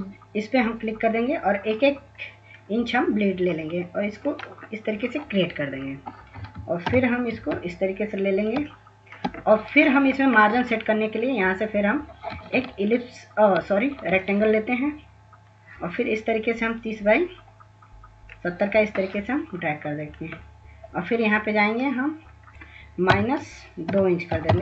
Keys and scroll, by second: 5.7 ctrl+-, 7.9 ctrl+-, 11.5 ctrl+s, 11.9 ctrl+-, 11.9 ctrl+s, 12.3 ctrl+-, 12.3 ctrl+s, 12.5 ctrl+-, 22.1-24.6 typing.